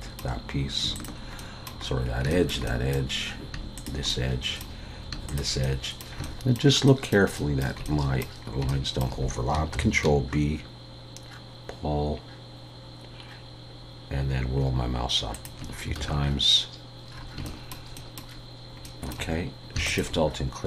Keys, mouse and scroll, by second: 0.9 shift+click, 1.4 middle click, 1.9-2.3 scroll down 2, 2.3 shift+middle click, 2.6 middle click, 3.7 shift+click, 4.1 middle click, 5.3 shift+click, 5.6 middle click, 6.2 shift+middle click, 7.8 middle click, 8.4 scroll up 2, 8.7 shift+middle click, 9.7 ctrl+b, 16.0 alt+a, 17.1-17.4 scroll down 4, 17.4 shift+scroll up 1, 19.9 alt+shift+click.